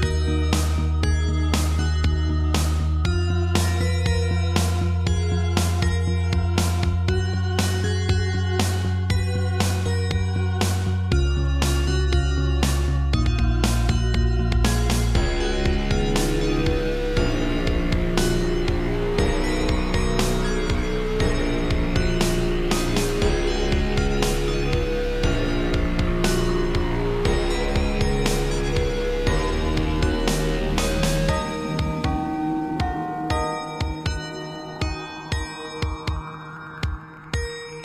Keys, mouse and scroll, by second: 0.1 scroll up 3, 0.4 middle click, 2.7 Right, 4.0-5.2 typing, 5.4 shift+middle click, 7.0 Right, 7.8 shift+middle click, 16.1 shift+middle click, 17.2 shift+middle click, 20.9 click, 21.0 click, 21.3 shift+middle click, 22.2 7, 23.7 shift+middle click, 24.3 middle click, 25.3 shift+middle click, 25.6 middle click, 27.3 click, 28.6 middle click, 29.8 shift+click, 30.8 shift+click, 31.0 shift+click, 32.4 scroll down 1, 33.1 shift+click, 33.3 shift+click, 34.0 shift+click, 34.7 shift+click, 35.5 3, 36.4 g.